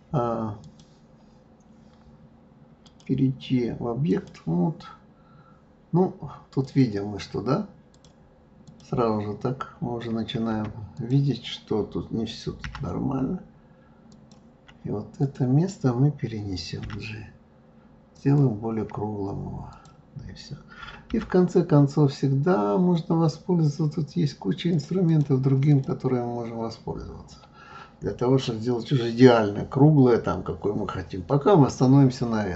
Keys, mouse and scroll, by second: 2.8-5.9 drag, 6.6 click, 7.9-11.0 drag, 12.6 g, 15.2 click, 16.8 g, 19.7 click, 21.1 g, 25.0 click, 25.7 click.